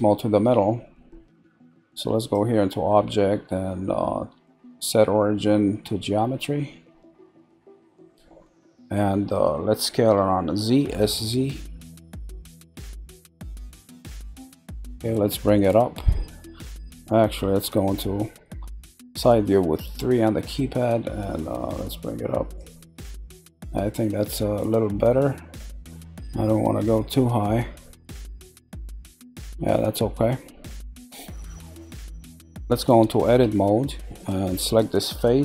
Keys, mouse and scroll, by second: 2.2-5.2 drag, 8.2-10.8 middle drag, 10.8 5, 14.7-17.5 middle drag, 19.5 click, 22.9-25.9 middle drag, 26.7-27.6 middle drag, 27.6 scroll, 28.1-30.4 middle drag, 30.4 scroll, 30.8-31.4 middle drag, 31.4 scroll, 31.6-33.4 middle drag, 33.4 Tab, 34.2 click.